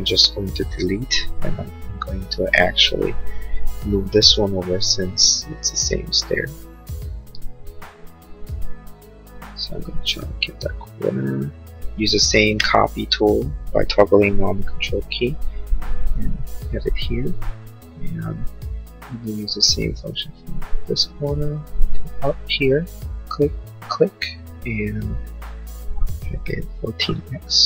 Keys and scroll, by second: 0.5 Delete, 4.5 m, 26.7 1, 27.3 x.